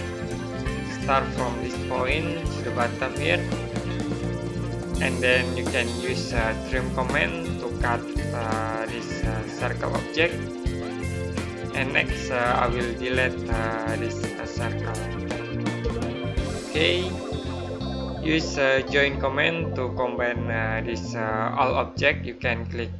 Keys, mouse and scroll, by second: 0.3 right click, 1.5 click, 4.4 right click, 6.7 click, 7.9 right click, 9.5 click, 11.8 right click, 12.9 click, 15.6 Delete.